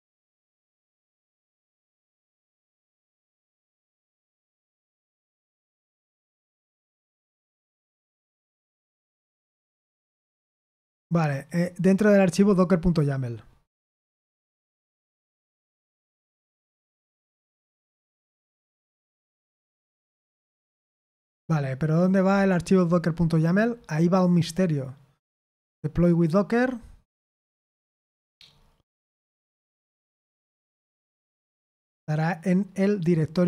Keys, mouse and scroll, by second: 1.9-2.5 scroll down 2, 4.7-5.4 scroll down 1, 5.4-7.8 scroll up 1, 7.8-9.2 scroll down 3, 11.8-14.3 scroll down 2, 19.8-21.3 scroll down 3, 21.3-22.7 scroll up 3, 23.4 click, 25.2 click, 30.7-32.6 scroll down 2, 32.6-33.4 scroll up 2.